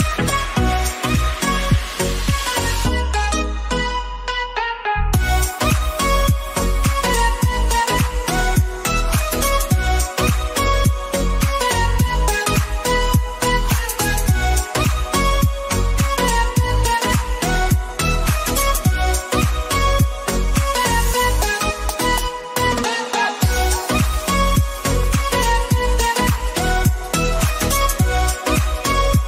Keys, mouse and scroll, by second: 1.5 click, 3.0-18.7 drag, 19.8-26.3 shift+drag.